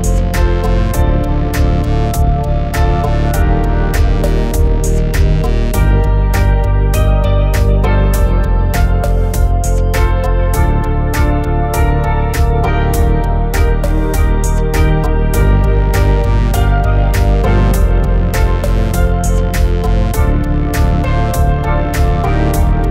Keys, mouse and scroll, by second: 0.1 middle drag, 0.1 scroll down 2, 0.4 shift+middle click, 0.4 scroll up 1, 0.8-1.9 drag, 2.0-4.9 drag, 5.2-5.7 drag, 6.4 click, 6.7 click, 6.8 click, 7.7-10.3 typing, 8.0 scroll down 5, 8.1 scroll up 1, 8.4 scroll down 1, 8.7 middle click, 8.9 click, 9.1 shift+middle click, 9.1 scroll down 4, 9.1 scroll up 1, 10.1 shift+click, 10.3 middle click, 11.2 middle click, 11.4 scroll up 3, 11.4 shift+middle click, 11.5 scroll down 1, 11.6 click, 11.7 scroll down 2, 11.8 scroll up 2, 11.9 shift+middle click, 11.9 scroll down 1, 12.0 g, 13.4 shift+middle drag, 13.7 click, 14.4 click, 14.5 shift+middle click, 14.5 scroll up 1, 14.6 g, 15.1 click, 15.2 g, 15.5 middle click, 15.6 scroll up 3, 15.7 shift+middle click, 15.7-16.1 scroll down 3, 15.9 click, 16.2 click, 16.5 click, 16.5 ctrl+z, 16.6 click, 17.4-22.8 typing, 17.8 scroll down 4, 17.9 shift+middle click, 17.9 scroll up 1, 18.1 click, 18.8 click, 19.7 click, 20.9 click, 22.2 click, 22.5 middle click, 22.6-22.9 scroll up 3, 22.7 click.